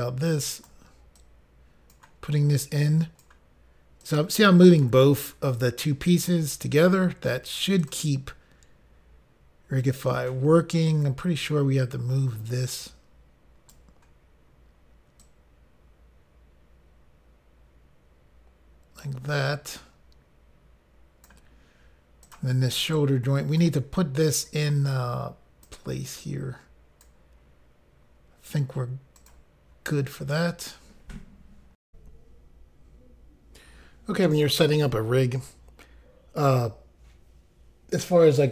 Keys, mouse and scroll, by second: 1.2 click, 2.6 click, 4.0 click, 5.5 click, 7.8 click, 7.9 click, 10.9 ctrl+right click, 15.2 click, 22.2 click, 22.4 click, 23.0 ctrl+right click, 24.5 click, 26.2 click, 29.2 click, 29.3 click, 31.8 Insert.